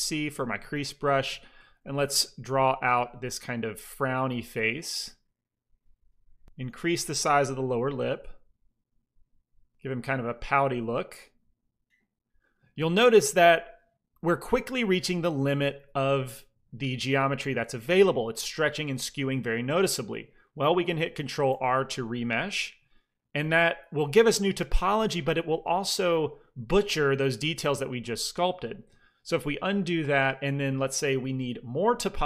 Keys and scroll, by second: 0.0-1.5 typing, 3.2 f, 6.9 f, 10.4 f, 15.2 shift+c, 15.4 f, 21.4 ctrl+r, 23.2 f, 28.7 ctrl+z.